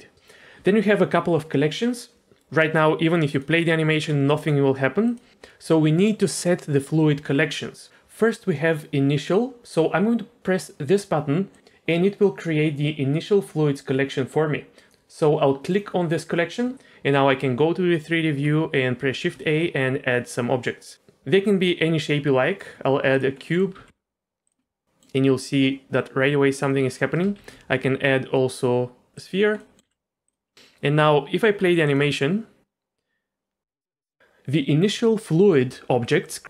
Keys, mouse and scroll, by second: 2.2 click, 3.3 click, 4.4 click, 5.0 click, 11.5 click, 14.9 ctrl+z, 15.7 click, 19.1 shift+a, 23.4 middle click, 23.7 g, 24.6-25.0 middle drag, 26.7 middle click, 27.4 shift+a, 29.6 middle drag, 29.8 g, 31.8 click, 33.9 space, 34.0 middle click.